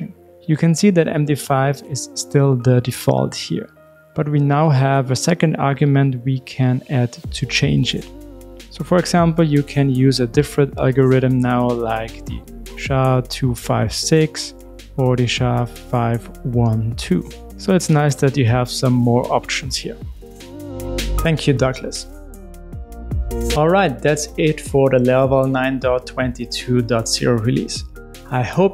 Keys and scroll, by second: 6.1 alt+Up, 8.4 super+e.